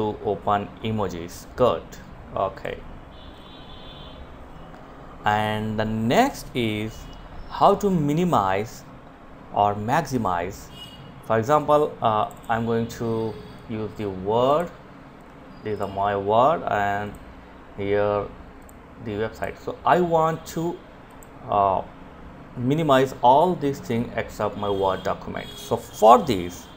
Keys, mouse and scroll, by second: 1.5-6.1 drag.